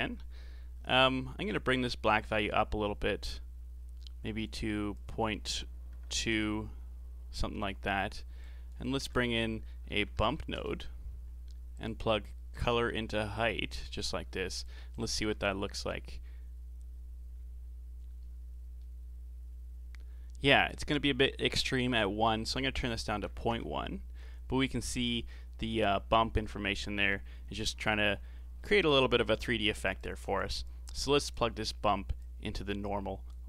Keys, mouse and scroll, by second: 2.1-7.7 drag, 7.7-8.4 middle drag, 8.4 click, 8.9 shift+a, 12.5 click, 14.5 ctrl+shift+click, 18.8-21.8 middle drag, 22.1-24.7 drag, 24.7-29.7 middle drag, 30.0 click, 30.9 click, 32.3 click.